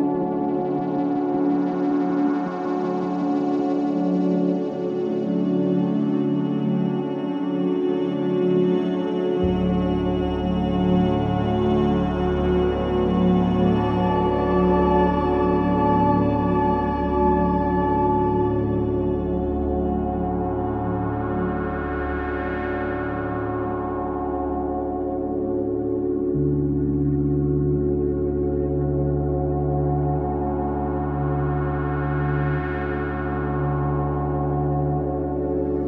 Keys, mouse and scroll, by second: 0.0 ctrl+z, 0.8 click, 3.4 ctrl+z, 4.1 click, 4.8 ctrl+z, 5.6 click, 6.9 ctrl+z, 7.8 click, 9.8 ctrl+z, 11.1 click, 14.5-15.0 scroll down 1, 17.1 click, 23.7 ctrl+z, 24.6 click, 25.3 ctrl+z, 25.9 click, 28.0 click, 29.9 ctrl+z, 30.6 click, 32.2 ctrl+z, 32.7 click.